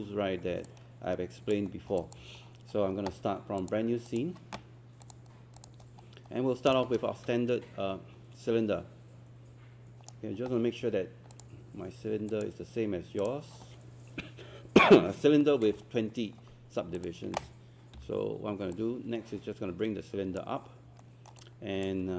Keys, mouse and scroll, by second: 0.4 scroll up 1, 0.7 alt+click, 1.8 scroll down 1, 2.0 alt+click, 2.4-3.6 scroll down 1, 3.6 click, 6.0 scroll up 1, 6.7 click, 7.2-10.2 shift+right drag, 11.3 click, 18.0 w, 18.8-20.6 drag, 20.6 scroll up 1, 21.0 alt+middle click.